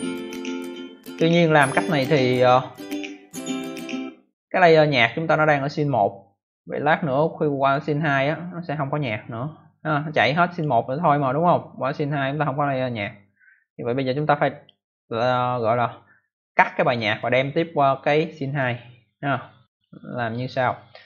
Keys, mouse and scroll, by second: 6.7 click, 7.5 click, 9.8 click, 11.8 click, 19.6 click, 20.9 click.